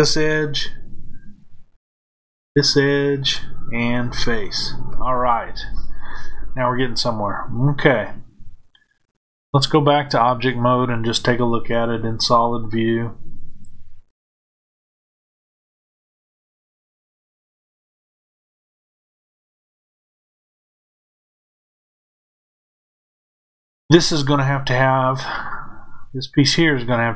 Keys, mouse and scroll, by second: 2.4 shift+click, 4.0 f, 9.6-12.6 drag, 18.0-27.1 middle drag.